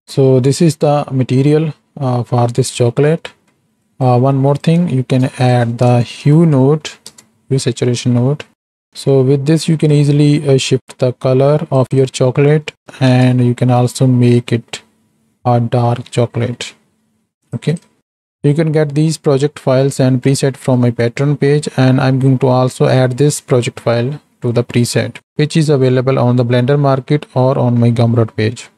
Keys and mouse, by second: 0.0 space, 0.0 z, 2.6 click, 3.4 click, 3.8 right click, 4.5 right click, 5.0 shift+a, 10.2-11.9 shift+drag, 12.1-13.3 drag, 14.4-17.8 shift+drag, 17.9 click.